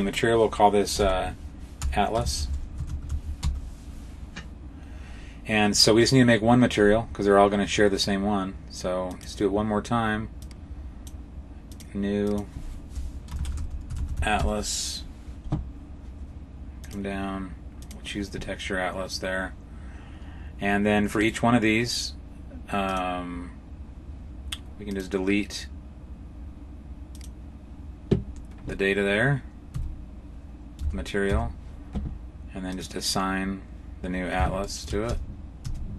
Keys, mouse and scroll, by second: 8.9 click, 10.3 click, 11.5 click, 12.1 click, 16.6 click, 21.1 right click, 22.7 click, 24.7 click, 27.0 click, 29.6 Tab, 30.6 a, 31.1 a, 32.6 click, 34.5 shift+middle click, 35.5 Tab.